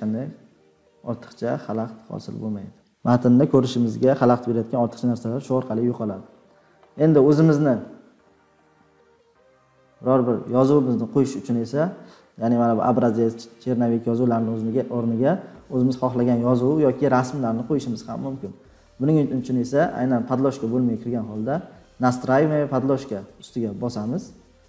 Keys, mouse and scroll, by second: 0.0 scroll, 0.7-3.6 scroll, 3.6 scroll down 11, 10.6-13.4 drag, 22.9 click.